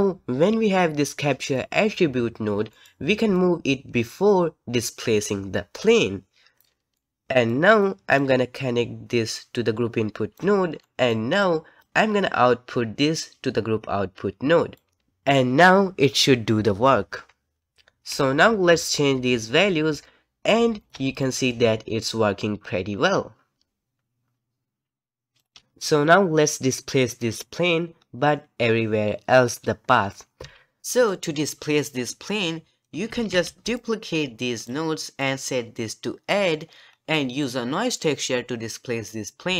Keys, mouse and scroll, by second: 3.5-6.6 alt+drag, 10.4 click, 14.8 click, 17.6 shift+right click, 18.3-20.9 shift+drag, 21.4-24.2 shift+drag, 28.0-30.0 scroll up 1, 30.0-30.4 scroll down 1, 30.4 z, 33.1 alt+a, 33.4 c, 35.0-36.9 middle drag, 36.9-37.4 scroll up 1, 37.4-39.5 middle drag.